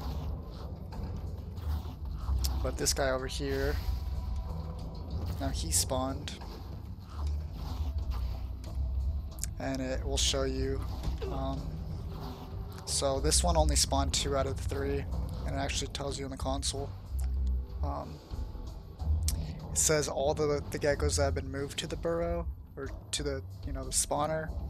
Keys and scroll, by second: 0.0 w, 0.6 a, 1.7 d, 2.8-6.1 typing, 7.4 `, 9.3-10.9 typing, 12.0-14.6 typing.